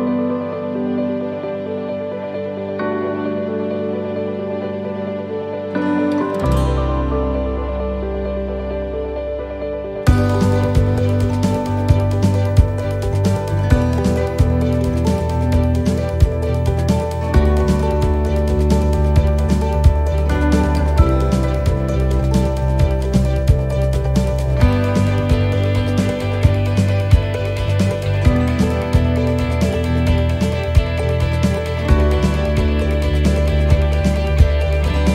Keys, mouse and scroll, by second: 0.8 middle click, 2.8 right click, 3.6 l, 3.9 middle click, 5.0 click, 7.6 middle click, 8.6 right click, 9.5 l, 9.8 middle click, 10.8 click, 12.6 middle click, 14.4 scroll up 1, 15.6-17.2 scroll up 1, 17.5 click, 18.2 middle click, 19.3 middle click, 20.2 middle click, 21.6 middle click, 21.6 scroll down 1, 22.2 middle click, 22.2 scroll down 4, 22.7-23.2 scroll up 3, 23.1 middle click, 23.4-24.7 scroll down 4, 24.7 middle click, 25.2-25.9 scroll up 5, 26.0 shift+middle click, 26.9 a, 27.8 u, 30.7-31.2 scroll down 3, 31.2 middle click, 32.6 shift+middle click, 33.3 middle click, 33.9 shift+middle click.